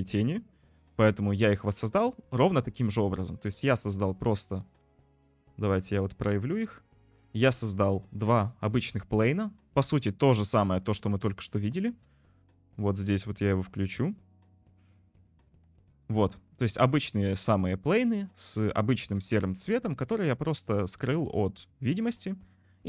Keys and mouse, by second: 4.6 click, 6.7 click, 8.7 click, 8.9 click, 9.4 click, 10.2 click, 10.3 middle click, 12.0 shift+click, 13.6 click, 14.1 click, 14.7 shift+middle click, 15.3 shift+middle click, 19.9 shift+middle click, 22.0 middle click.